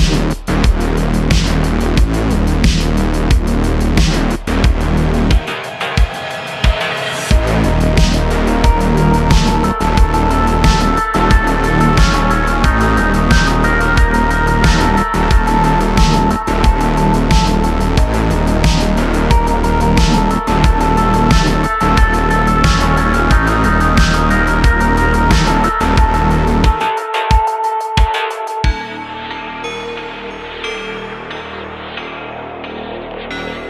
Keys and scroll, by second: 4.4 Tab, 5.4 `, 7.4 `, 8.4 Tab, 12.4 shift+a, 27.7 super+r, 28.1 Tab, 28.4 super+r, 30.5 3, 32.3 Tab, 33.2 s.